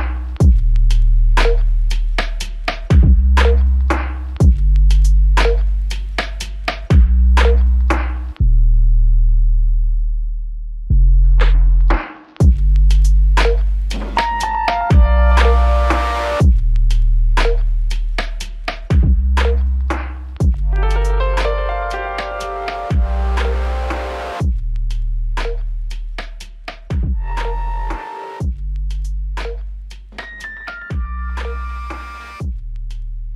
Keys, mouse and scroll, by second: 1.8 w, 2.0 ctrl+click, 3.5 alt+click, 11.6 double click, 18.3 alt+click, 21.0 ctrl+click, 25.7 ctrl+click, 28.2 w, 29.7 alt+click.